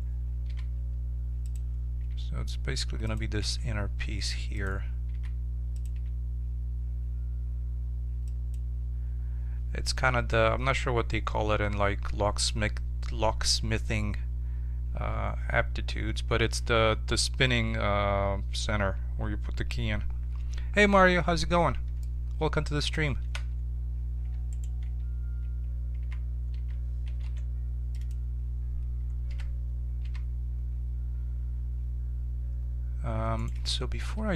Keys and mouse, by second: 0.4 s, 2.0 g, 3.4 s, 5.1 s, 5.9 g, 22.0-23.6 middle drag, 23.3 Tab, 24.2 Tab, 24.5-26.0 right drag, 24.8 Tab, 26.0 z, 26.5 z, 27.2 ctrl+Tab, 29.3 e, 34.2 ctrl+z.